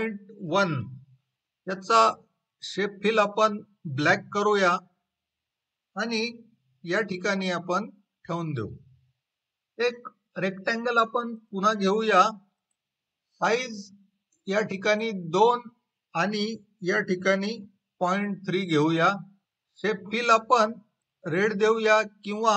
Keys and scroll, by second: 0.0-0.4 typing, 13.2 2, 18.0-18.7 typing, 19.1 Return.